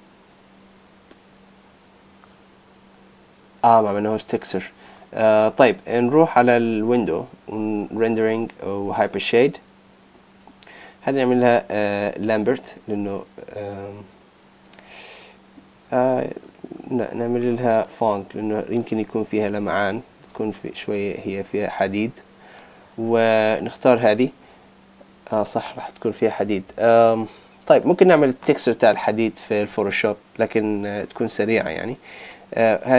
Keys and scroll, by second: 0.2 super+Tab.